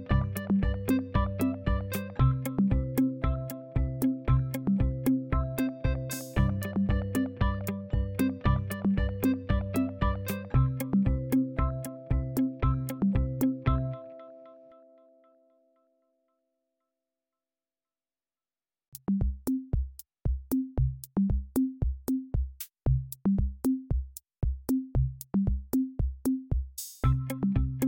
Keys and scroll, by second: 8.0 ctrl+d, 14.4-17.6 typing.